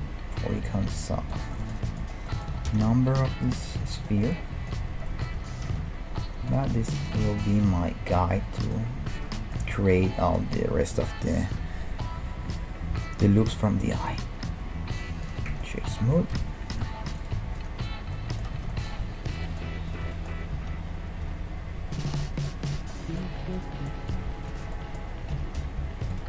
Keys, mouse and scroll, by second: 1.6-5.1 middle drag, 2.7 g, 5.4 g, 8.5-11.7 middle drag, 9.2-12.3 right drag, 11.4 Tab, 12.2 w, 15.5 Tab, 15.7 middle click, 16.3 KP_1, 17.1-18.9 right drag, 17.6 Tab, 18.1-19.9 middle drag, 18.5 z, 19.9-21.7 drag, 19.9-21.9 right drag, 20.6 g, 21.7 middle click, 22.2 middle click, 22.8-26.2 right drag, 25.4 g, 26.1 middle click.